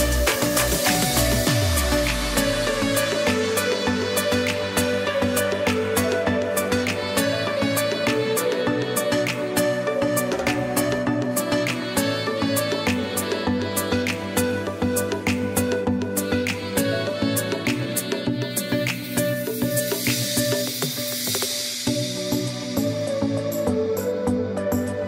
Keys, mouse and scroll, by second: 4.5 click, 4.7 space, 5.0 click, 5.5 space, 5.6-17.7 drag, 18.0 space, 18.2 click, 18.7 space, 18.9-22.0 drag, 22.0-25.0 drag.